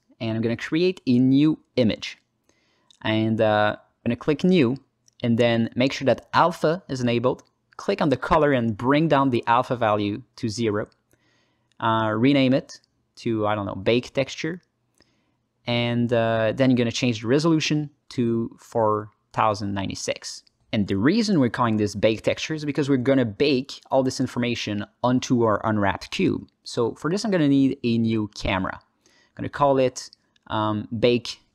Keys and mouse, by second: 0.2 alt+middle click, 1.0 shift+a, 3.6 middle click, 4.0 ctrl+alt+middle click, 4.7-21.1 drag, 22.1-24.7 alt+middle drag, 26.9 shift+a, 29.8-31.5 shift+drag.